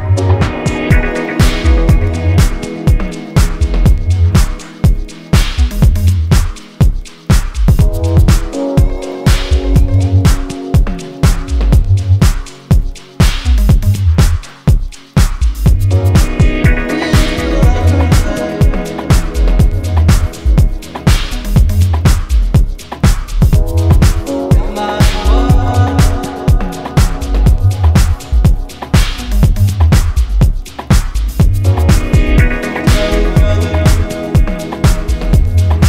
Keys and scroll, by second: 17.3 ctrl+KP_Add, 17.3 ctrl+KP_Add, 17.5 ctrl+KP_Add, 17.6 ctrl+KP_Add, 17.8-18.6 ctrl+KP_Add.